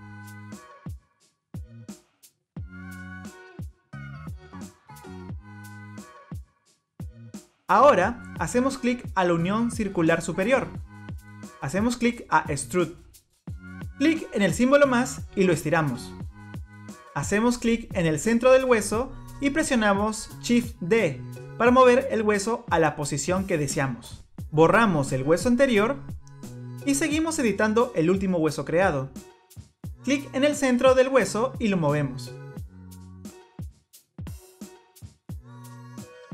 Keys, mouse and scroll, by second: 1.9 click, 2.3 middle click, 2.7 click, 3.0 click, 3.4 middle click, 4.3 click, 5.8 middle click, 9.8 click, 12.8 click, 17.4-17.9 scroll down 1, 17.9 click, 20.3 shift+d, 24.3 click, 25.5 Delete, 26.6 middle click, 28.5 click, 29.9 click, 32.7 click, 33.8 click, 34.7 click, 34.9 middle click, 35.3 click, 36.0 click.